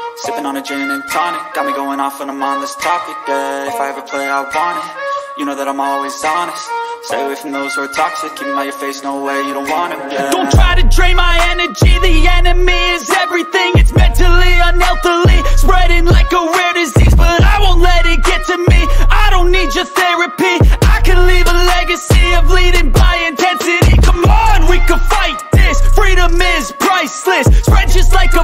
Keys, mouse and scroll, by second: 0.6 click, 1.4 click, 13.5 click, 15.2 click, 24.8 click, 27.6 click.